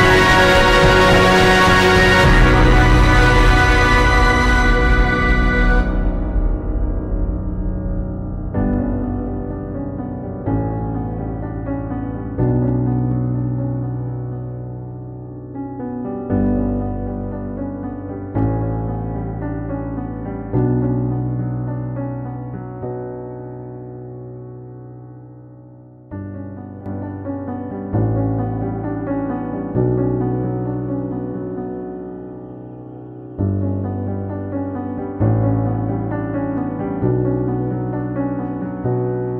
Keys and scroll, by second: 0.0 Return, 1.8 ctrl+g, 2.0-2.9 typing, 4.5 Return, 4.8 ctrl+t, 8.0 ctrl+j, 13.5 b, 14.7 b, 15.1 [, 17.2 space, 23.1 x, 23.8 [, 26.5 x, 27.1 ], 28.2 [, 28.8 space, 31.1 ], 31.5 ], 34.3 [, 35.8 ], 35.9 [, 37.1 ], 37.5 [, 38.0 [, 38.3 ctrl+z.